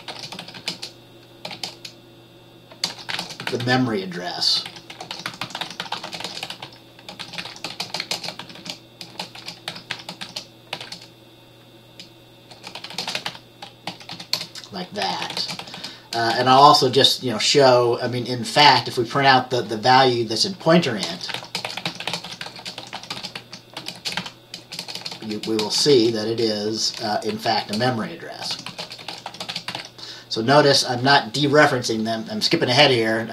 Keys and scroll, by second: 0.0-1.6 typing, 2.8-11.4 typing, 12.6-16.8 typing, 21.1-26.3 typing, 27.4-30.3 typing.